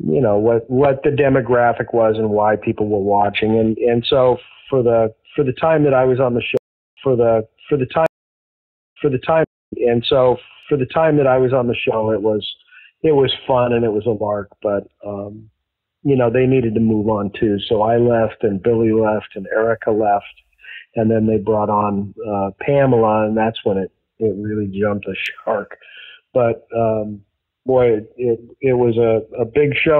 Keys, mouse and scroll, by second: 0.0-1.7 drag, 2.0 click, 2.8 click, 3.7 click, 5.0 click, 6.5 space, 6.8 click, 6.9 space, 7.4 click, 8.0 space, 8.6 ctrl+shift+Delete, 8.9 space, 9.3 space, 9.5 click, 9.6 space, 11.6 ctrl+s, 14.2-15.8 drag, 16.2 click, 17.4 click, 19.5 click, 20.7 click, 21.9-23.4 drag, 23.8 click, 24.6 click, 25.6 click, 27.2 click, 27.9 click, 29.4 ctrl+s.